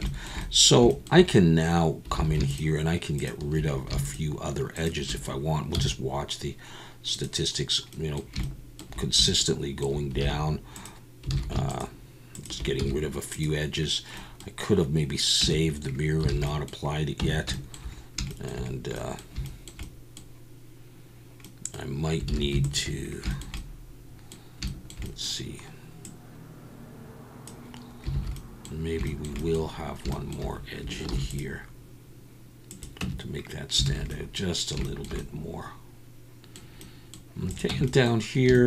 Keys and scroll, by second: 2.2 alt+a, 5.7 x, 10.2 alt+a, 11.3 alt+a, 12.8 x, 15.4 Tab, 16.3 alt+a, 17.2 Tab, 22.3 alt+a, 28.1 alt+a, 31.1 ctrl+r, 33.0 Tab, 33.9 alt+a, 37.7 Tab.